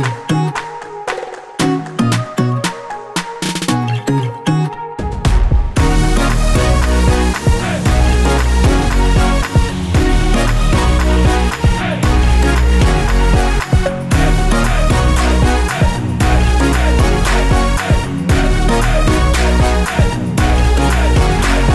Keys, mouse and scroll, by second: 0.2 click, 1.5 click, 2.0 click, 3.0 click, 5.0 click, 8.1 click, 8.8 scroll down 1, 9.0 F4, 9.3 click, 10.1 F9, 11.1 click, 12.0 ctrl+o, 13.7 click, 17.1 F4, 19.5 click, 20.3 ctrl+o.